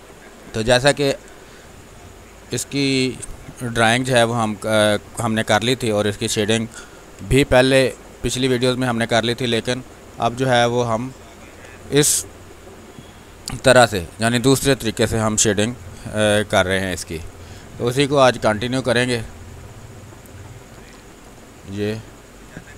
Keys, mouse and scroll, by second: 3.7 b, 4.1 space, 4.3 ctrl+click, 5.1 click, 5.3 r, 6.8 b, 7.2 space, 7.5 ctrl+click, 8.0-11.4 drag, 11.4 ctrl+z, 11.6 space, 11.8 click, 12.1 space, 14.0 click, 14.4 space, 14.7 r, 14.9 click, 15.6 b, 18.0-19.8 ctrl+drag, 22.0 space, 22.5 click.